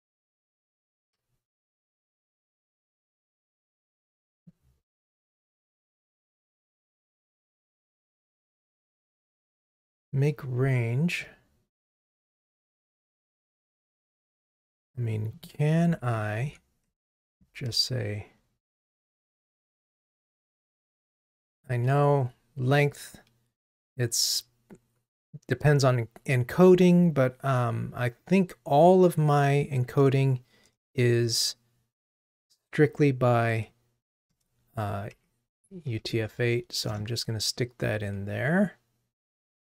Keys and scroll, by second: 16.1 Delete, 34.4 Return.